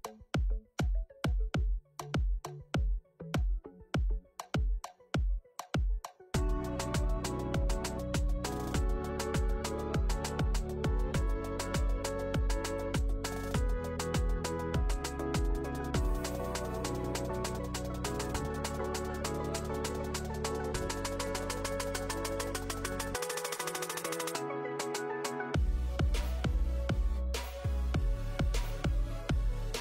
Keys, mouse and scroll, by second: 0.6-2.5 scroll down 13, 4.8 middle click, 5.2-5.8 scroll up 1, 5.8 KP_1, 6.7 ctrl+z, 6.8 ctrl+z, 7.1 ctrl+z, 7.2 ctrl+z, 7.6 ctrl+z, 8.3 middle click, 10.7 KP_1, 11.4 a, 11.9 click, 17.3 KP_7, 19.8 ctrl+z, 28.6 click, 28.6-29.8 scroll down 1.